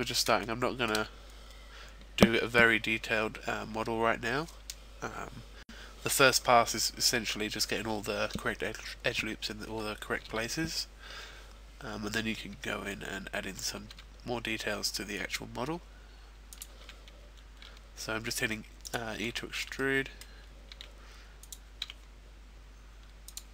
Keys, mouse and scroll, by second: 0.4 shift+middle click, 12.6-13.2 scroll up 2, 13.2-14.0 scroll down 1, 14.0 e, 16.5 click, 17.0 e, 18.8 click, 19.4 shift+middle click, 19.8 middle click, 20.9 e, 21.5 click, 22.3 e, 23.3 click.